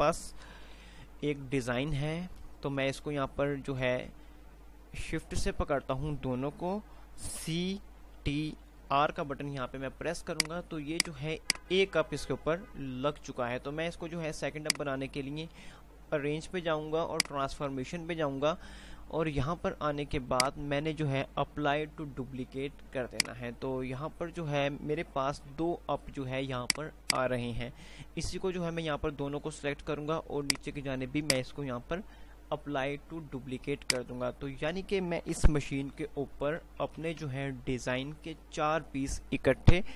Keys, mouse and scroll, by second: 0.8 Page_Up, 3.0 typing, 3.3 shift+click, 7.5 typing, 8.7-9.3 typing, 10.5 click, 11.7-14.8 drag, 13.0 typing, 14.5 click, 19.8 typing, 21.0 click, 21.2 click, 23.7 click, 25.5 ctrl+z, 26.8-31.2 drag, 27.3 typing, 34.0-35.7 drag, 35.7 ctrl+g, 35.7 Delete, 37.0 ctrl+z.